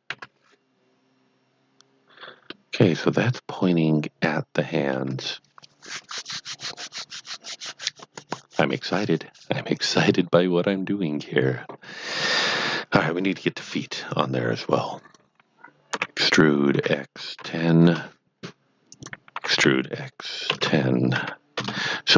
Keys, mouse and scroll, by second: 0.1 KP_1, 2.5 middle click, 13.5 KP_1, 15.0 click, 15.9-17.4 typing, 17.8 KP_Enter, 18.8 click, 19.1-20.4 typing, 21.1 KP_Subtract, 21.6 KP_Enter.